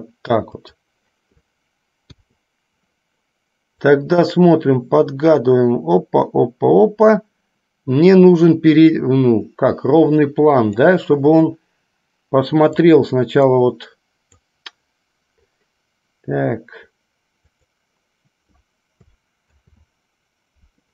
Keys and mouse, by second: 2.3 i, 3.9-11.1 drag, 13.2-14.8 drag, 17.8 click, 19.7 ctrl+z.